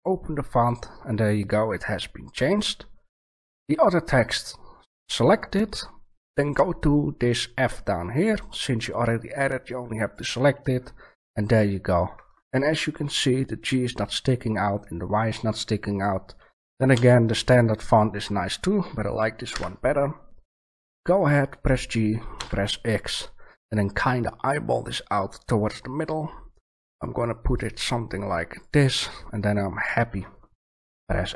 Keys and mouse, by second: 4.8 right click, 5.9-10.0 drag, 16.9 b, 19.5 g, 28.6-30.5 middle drag.